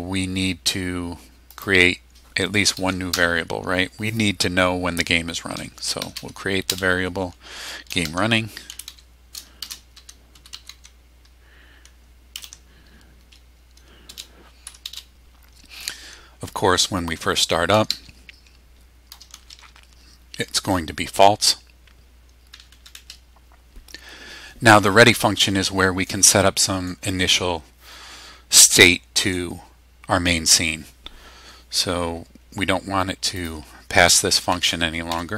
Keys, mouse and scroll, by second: 1.5 click, 3.1 Return, 5.6-12.9 typing, 14.1 space, 14.7 =, 14.8 space, 17.5-20.0 typing, 22.5 Down, 33.4 click, 34.3 BackSpace.